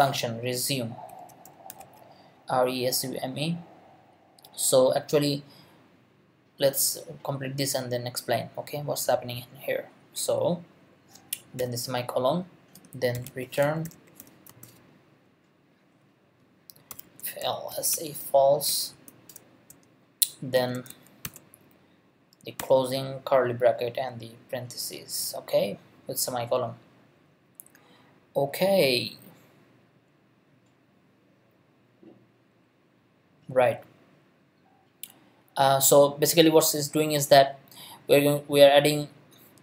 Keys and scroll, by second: 0.0-2.3 typing, 11.6 ;, 12.9-14.7 typing, 16.7-18.9 typing, 20.6 shift+], 21.2 shift+0.